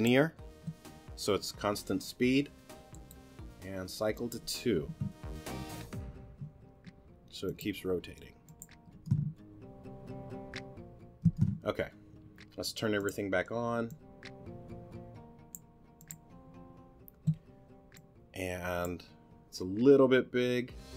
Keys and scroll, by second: 4.9 2, 8.9 space, 11.2 space.